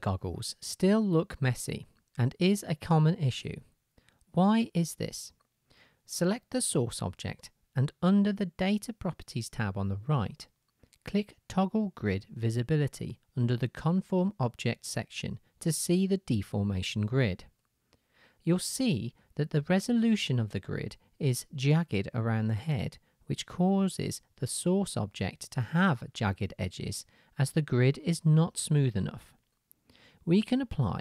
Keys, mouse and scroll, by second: 4.1-7.3 drag, 7.3-10.3 middle drag, 10.3-11.4 drag, 11.4-15.2 middle drag, 15.2-18.7 drag, 19.3-20.5 shift+drag, 21.0-21.9 drag, 25.1-31.0 drag.